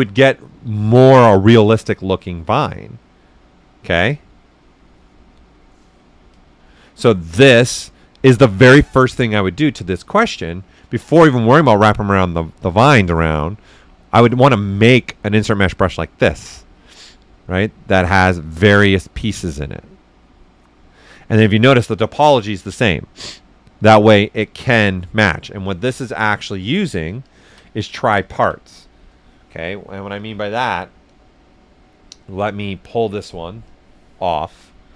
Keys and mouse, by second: 27.1 typing, 27.2 ctrl+shift+click, 28.4 ctrl+right click, 30.1 shift+click, 33.6 shift+click, 33.6 typing.